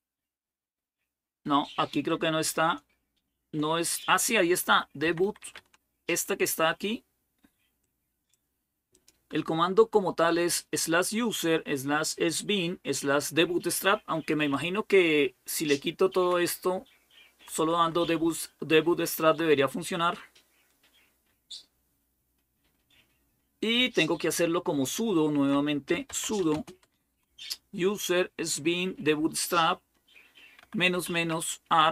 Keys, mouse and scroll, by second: 2.8 BackSpace, 4.6-5.7 typing, 7.6-9.6 drag, 8.3-9.0 typing, 14.4-16.1 Left, 16.5-17.3 Right, 17.4 Right, 17.6 Right, 17.8 Right, 18.0-19.2 Right, 23.5-25.3 Left, 25.5-26.7 typing, 27.1-28.9 Right, 30.2-31.9 typing.